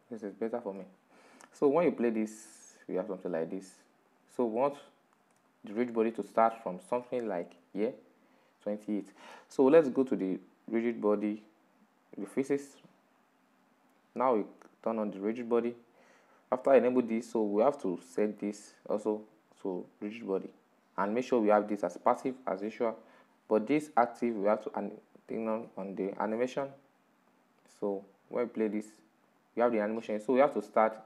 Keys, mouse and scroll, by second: 1.8-4.2 drag, 4.2-7.2 middle drag, 7.2 Left, 7.5 Left, 10.7-12.3 drag, 12.5 click, 12.8 click, 14.6-17.6 drag, 18.3 right click, 19.7-22.6 drag, 22.6 right click, 24.8 click, 26.9-31.0 drag.